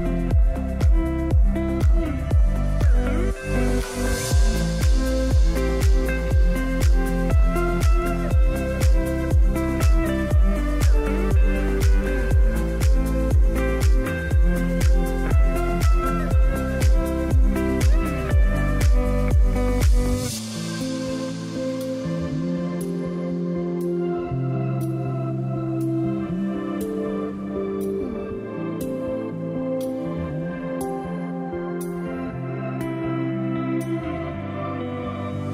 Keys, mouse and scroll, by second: 15.3 scroll down 1, 16.7 click, 20.4 click, 22.8-25.4 drag.